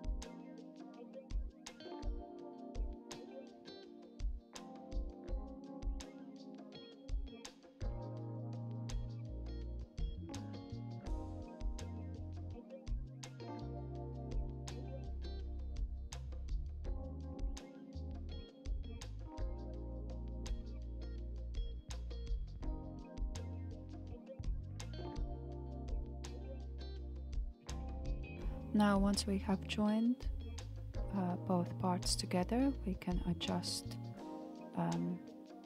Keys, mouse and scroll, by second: 1.8 f, 2.4-2.9 scroll down 1, 2.9-4.9 shift+middle drag, 4.9 click, 5.8 click, 6.3 click, 7.2 shift+click, 8.3 f, 8.7-10.3 shift+middle drag, 10.3 click, 11.2 click, 11.7 click, 12.1 click, 12.6 click, 13.2 click, 13.7 click, 15.1 shift+click, 16.1 f, 16.5-18.0 shift+middle drag, 18.0 click, 18.9 shift+click, 19.9 f, 20.4-21.7 shift+middle drag, 21.7 click, 22.6 shift+click, 23.5 f, 24.1-25.7 shift+middle drag, 25.7 click, 26.5 shift+click, 27.6 f, 28.1-29.8 middle drag, 29.8-30.4 scroll down 4, 30.4-31.2 shift+middle drag, 31.2-31.9 scroll up 2, 31.9-35.6 shift+middle drag.